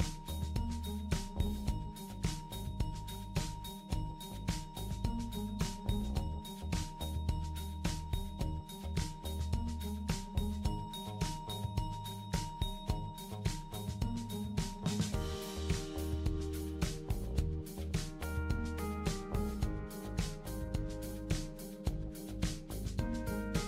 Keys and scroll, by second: 15.2 ctrl+d, 15.6 super+c, 17.2 super+d, 22.6 super+d, 23.0-23.6 super+d.